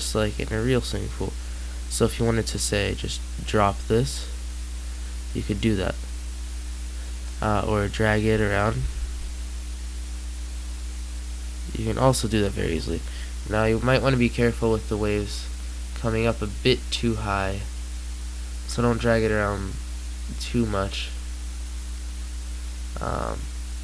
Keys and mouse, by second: 8.2 g.